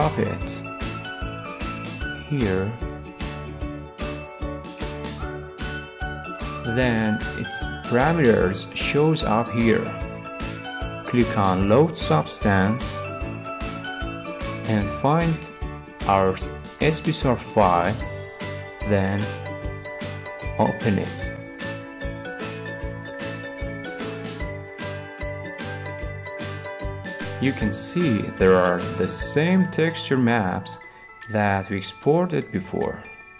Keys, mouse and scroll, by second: 2.6-3.6 drag, 3.6-5.7 middle drag, 3.6-5.0 scroll, 5.7 scroll, 6.6 click, 12.2-13.3 drag, 15.3-16.3 drag, 17.8-19.1 drag, 19.4-20.7 drag, 22.0-23.2 drag, 23.5-24.6 drag, 30.5 click, 31.1 click, 33.0 click.